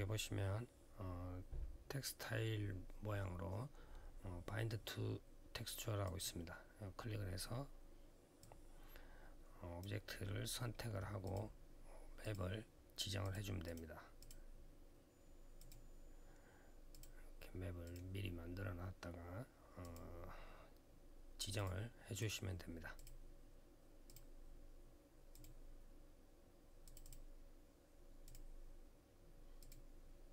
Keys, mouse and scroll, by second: 5.8 click, 8.2 click, 11.0 click, 12.0 click, 12.1 click, 13.0 click, 13.5 double click, 14.0 double click, 15.4 click, 16.7 click, 17.6 click, 19.6 click, 21.3 click, 22.0 click, 22.7 click, 23.8 click, 25.1 click, 25.2 click, 26.6 click, 26.8 click, 26.9 double click, 28.0 double click, 29.4 click.